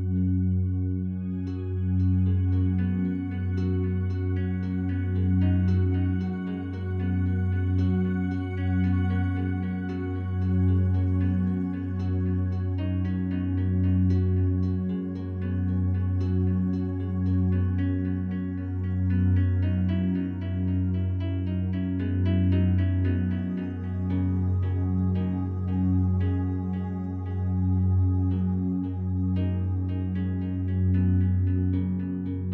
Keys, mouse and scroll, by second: 9.6 click, 10.9 s, 14.1 Tab, 14.5 right click, 16.6-25.7 alt+drag, 29.7-32.5 alt+drag.